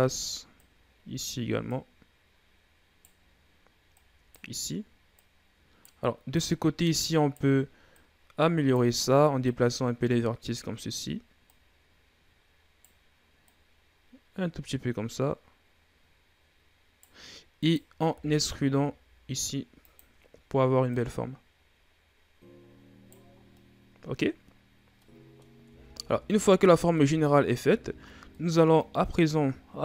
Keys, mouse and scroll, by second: 0.4 right click, 1.5 right click, 3.8 right click, 5.0 right click, 6.2 right click, 7.8 right click, 9.3 right click, 11.3 right click, 13.3 right click, 17.4 right click, 18.0 e, 20.7 right click, 23.2 scroll down 4, 23.4 middle click, 24.2-24.8 scroll up 4, 24.8 middle click, 25.5 Tab, 25.9 Tab, 26.5 middle click, 26.8 Tab, 27.6-28.2 scroll up 2, 28.2-29.8 middle drag.